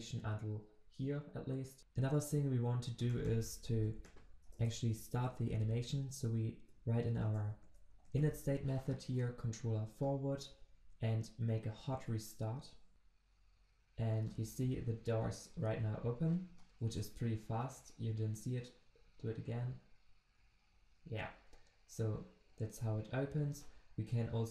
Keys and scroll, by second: 3.7 ctrl+c, 5.2 ctrl+v, 7.2 Return, 9.7 ctrl+s, 11.9 ctrl+shift+\, 16.8 ctrl+shift+\.